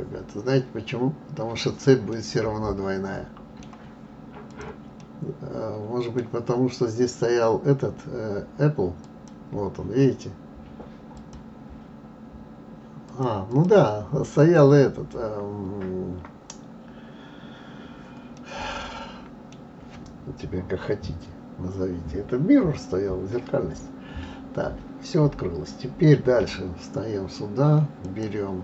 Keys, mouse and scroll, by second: 2.1-4.4 middle drag, 4.4 click, 5.0-8.0 middle drag, 9.0 click, 11.1 click, 13.1 click, 13.5 click, 14.3 click, 18.4-21.4 middle drag, 21.4-23.0 scroll down 2, 26.4 KP_3, 28.0 click.